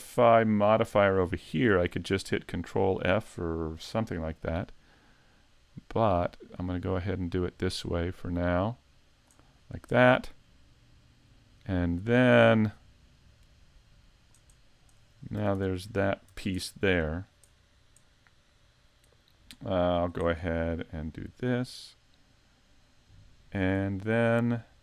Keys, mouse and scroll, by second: 2.2 middle click, 4.4 click, 9.6-10.0 scroll up 3, 10.0 middle click, 12.7 click, 14.6-15.0 scroll down 1, 15.0 middle click, 15.4 a, 15.5 Tab, 15.8 scroll down 3, 16.3 Tab, 16.6 middle click, 17.5-17.8 scroll down 2, 18.0 middle click, 19.9 click, 21.0 click, 21.4 click, 21.9 middle click, 24.6 click.